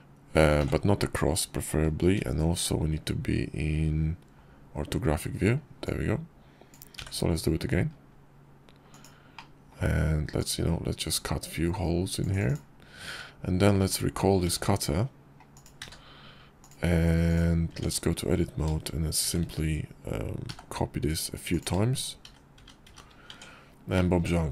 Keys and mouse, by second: 0.4 ctrl+z, 2.0 shift+v, 4.5 KP_5, 5.7-8.9 drag, 9.2-9.6 middle drag, 12.3 click, 12.9 `, 13.6 `, 14.3 `, 15.4 click, 15.6 q, 17.6 Tab, 19.1 shift+d, 22.4 shift+r, 22.7 shift+r, 23.1 Tab.